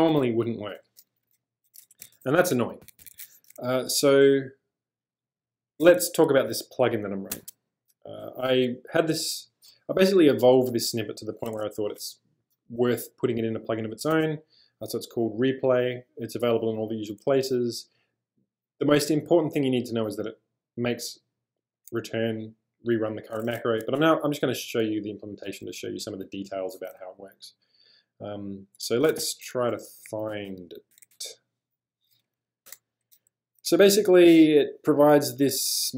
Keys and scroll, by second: 2.0 d, 2.1 d, 2.8 Escape, 3.0 Escape, 3.1 Escape, 7.3 super+Tab, 11.8 shift+super+}, 23.8 super+Tab, 29.2-31.5 typing, 32.4 Up, 32.7 Return.